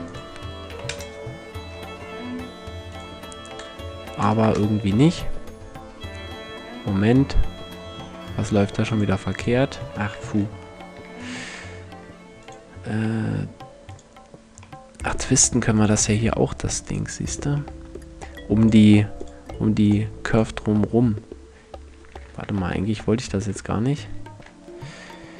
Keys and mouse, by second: 2.0-2.5 middle drag, 2.5-4.5 drag, 7.3-8.5 middle drag, 8.5-9.5 drag, 9.6 click, 10.0 ctrl+z, 10.3 ctrl+z, 14.2-15.4 middle drag, 17.4 middle click, 17.4-21.4 drag, 22.2-23.0 ctrl+z, 23.6 ctrl+z.